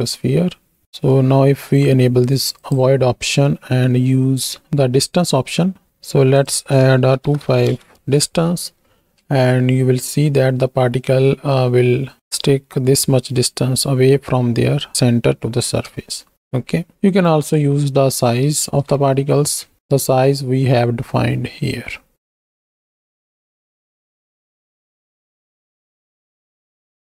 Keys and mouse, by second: 2.5 click, 4.6 shift+Right, 4.6 shift+Left, 5.3 click, 6.4-7.7 drag, 7.9 shift+Right, 7.9 shift+Left, 9.2 space, 12.5 shift+click, 15.9 space, 16.3 space, 16.9 space, 17.5 click, 17.5 space, 18.7 shift+Right, 18.8 shift+Left, 19.7 space, 20.4 click, 22.9 space, 23.4 shift+click, 23.6 z, 23.9 click, 25.1-26.1 drag, 26.5 KP_1.